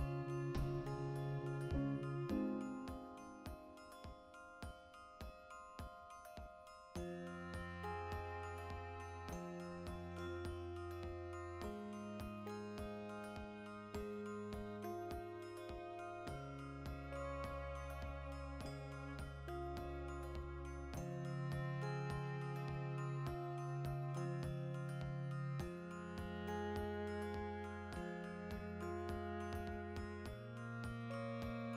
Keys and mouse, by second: 7.1-8.6 ctrl+middle drag, 8.6-15.8 drag, 15.8-16.9 right drag, 16.9 1, 17.8-19.2 drag, 19.2 right click, 20.0 alt+q, 20.3 ctrl+shift+middle click, 20.7 right click, 21.2 z, 21.4 ctrl+middle click, 21.7 shift+right click, 22.1 \, 22.5 z, 22.7-23.9 ctrl+middle drag, 23.0 z, 23.9-25.9 drag, 25.9 shift+middle click, 26.1 right click, 26.2-28.3 ctrl+middle drag, 26.4 Tab, 28.3 right click, 28.8-30.8 ctrl+shift+middle drag, 30.0 g, 30.8 click.